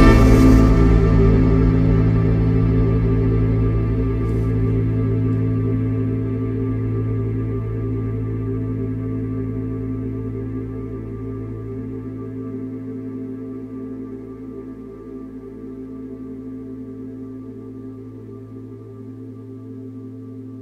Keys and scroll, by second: 0.3 4, 1.2 3, 4.6 7, 17.6 4, 18.1 2.